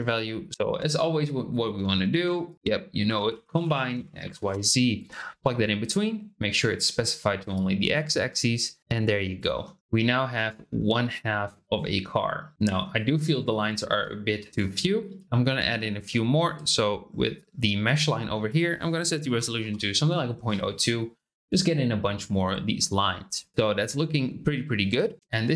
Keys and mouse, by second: 0.5 shift+click, 2.1 shift+a, 7.9-9.3 drag, 9.8 middle click, 12.5 middle click, 15.2 shift+middle click, 15.6 shift+middle click, 16.1 shift+middle click, 18.4-20.8 drag, 23.7 shift+middle click.